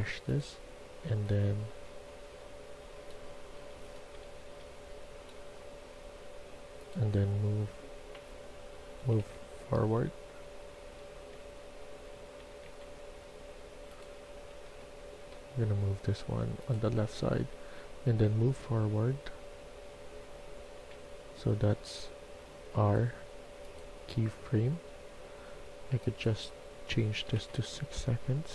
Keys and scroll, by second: 1.7 a, 3.2-4.4 typing, 7.0-11.2 typing, 12.3-13.3 typing, 14.4 a, 14.7 a, 17.4-20.7 w, 27.1 6, 27.3 Return.